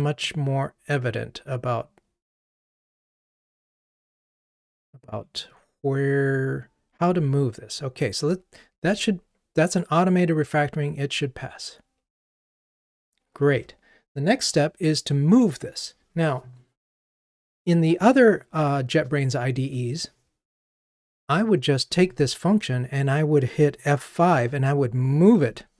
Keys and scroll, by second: 11.1 ctrl+r.